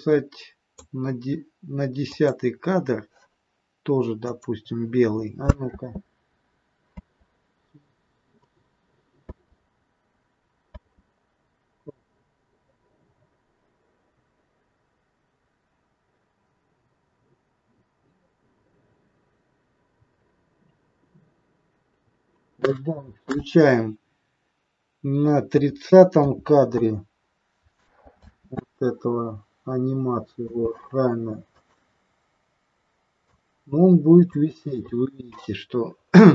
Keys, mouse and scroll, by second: 2.2 click, 4.2 click, 5.7 space, 7.0 space, 8.5 click, 9.2 space, 10.7 space, 11.8 click, 14.8-15.6 scroll up 1, 15.6-18.0 scroll down 2, 19.9 scroll up 3, 22.1 click, 28.3 space, 30.6 space, 31.6 click, 33.3 click.